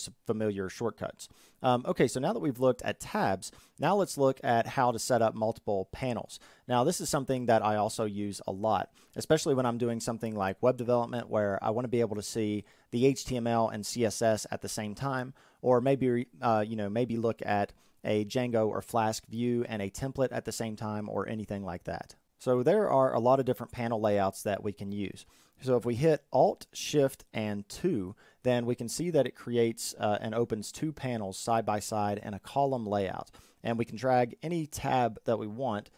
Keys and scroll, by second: 26.2 alt+shift+2.